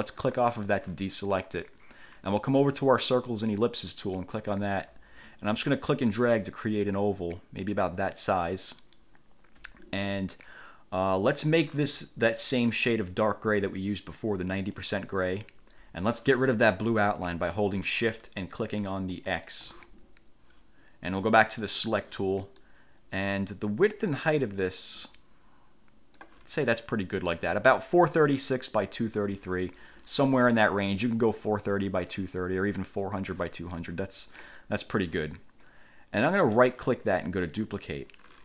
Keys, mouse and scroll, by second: 0.4 click, 4.0 click, 6.2-9.0 drag, 14.8 click, 19.3 shift+click, 21.8 click, 22.8 click, 24.3-26.6 drag, 34.0 click, 36.7 right click, 37.6 click.